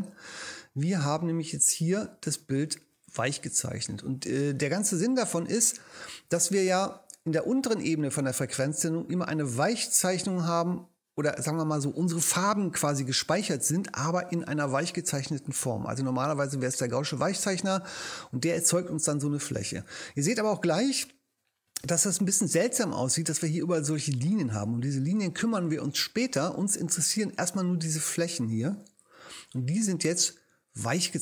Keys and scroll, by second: 4.9 space.